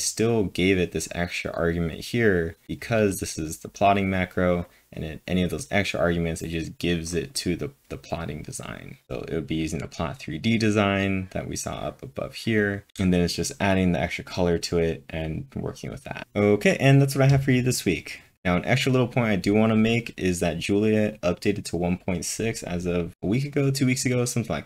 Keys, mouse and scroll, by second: 1.1-2.6 drag, 2.6-3.1 scroll up 10, 9.8 scroll down 1, 9.9-10.5 scroll down 3, 11.8 click, 12.7 double click.